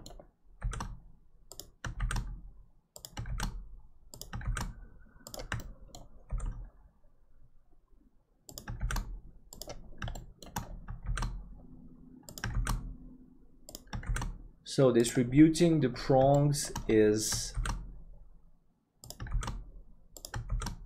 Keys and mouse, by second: 5.6 shift+middle click, 10.2 middle click, 16.4 middle click, 17.6 shift+d, 19.4 shift+d.